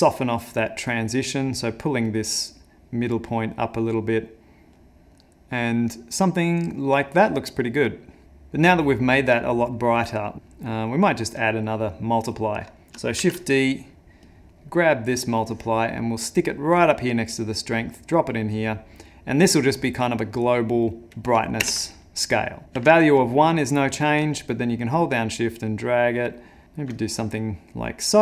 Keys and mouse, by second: 1.9 click, 3.7 click, 10.0 middle click, 10.8 middle click, 11.4 middle click, 12.3 middle click, 12.3 click, 13.2 shift+d, 14.5 middle click, 15.4 click, 15.9 middle click, 16.7 click, 21.8 ctrl+space, 22.6 ctrl+middle click, 22.6 click, 23.2 click, 24.3 shift+click, 27.8 middle click.